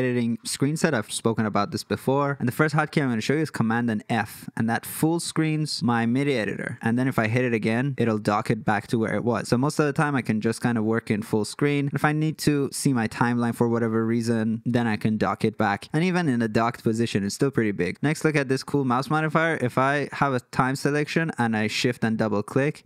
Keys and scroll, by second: 3.6 super+f, 7.3 super+f.